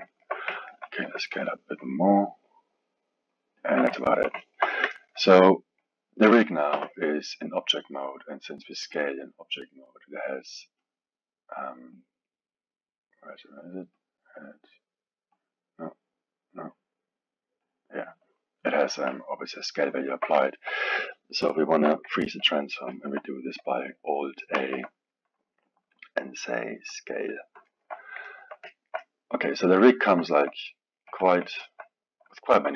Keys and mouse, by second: 0.1-1.0 ctrl+middle drag, 1.0 s, 4.0-6.7 ctrl+middle drag, 6.7 n, 10.8 click, 11.9 click, 13.9 click, 15.3-20.0 drag, 20.0-24.5 alt+middle drag, 24.5 ctrl+a, 27.6-31.1 alt+middle drag, 31.1 KP_1, 31.5-32.7 alt+middle drag.